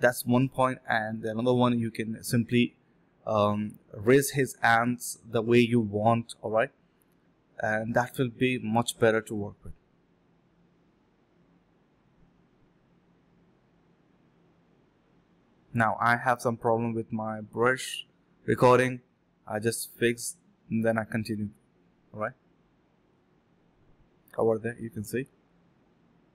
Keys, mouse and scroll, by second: 0.2 alt+click, 0.3 alt+click, 1.1 alt+click, 2.3 alt+click, 2.9 alt+click, 3.7 alt+click, 4.5 alt+click, 5.6 double click, 6.3 shift+click, 6.7 alt+click, 6.7 alt+double click, 6.8 alt+click, 6.9 shift+click, 7.0 shift+double click, 7.1 shift+click, 7.3 double click, 8.1 shift+click, 8.5 shift+click, 8.9 alt+click, 9.3 double click, 11.1 shift+click, 11.5 alt+click, 12.3 double click, 18.8 double click, 20.2 ctrl+z, 24.7 ctrl+z, 24.9 alt+click, 25.3 alt+click.